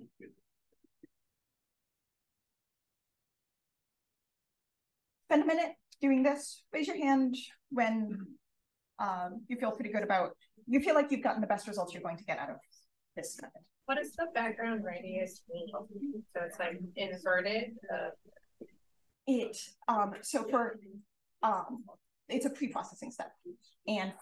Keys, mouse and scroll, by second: 2.2-3.9 scroll up 2, 2.6-2.9 drag, 5.1-7.7 scroll up 2, 7.7-8.9 scroll up 1, 8.9-11.0 scroll up 1, 11.0-13.8 scroll up 1, 14.7-15.5 scroll up 2, 15.5-16.9 scroll up 1, 16.9-19.1 scroll up 1, 19.1-24.2 scroll up 1.